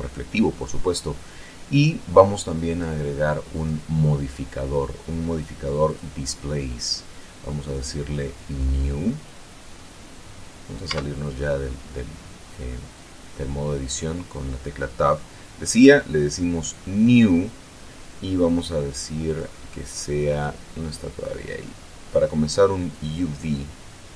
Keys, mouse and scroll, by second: 3.2 click, 4.0 click, 6.3 click, 8.9 click, 11.3 Tab, 13.8-15.6 middle drag, 19.7 click, 20.8 click, 21.8 click, 23.3 click.